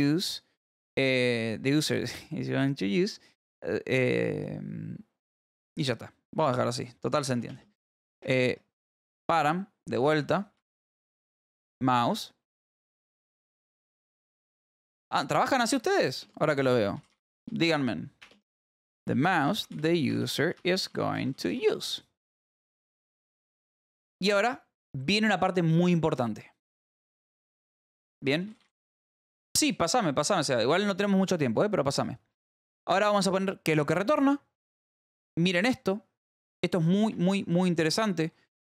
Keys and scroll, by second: 0.0-0.4 typing, 6.9 Return, 7.4-9.5 typing, 10.5 Left, 10.7 space, 10.8 BackSpace, 11.0 space, 12.3-22.3 typing, 22.4 Return, 27.8-29.4 typing, 37.6 Escape, 38.1 j.